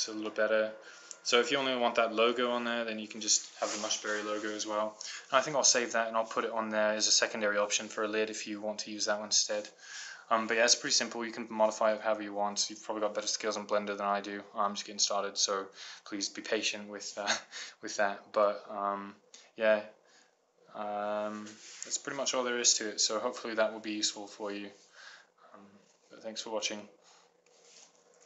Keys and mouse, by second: 0.0-4.5 middle drag.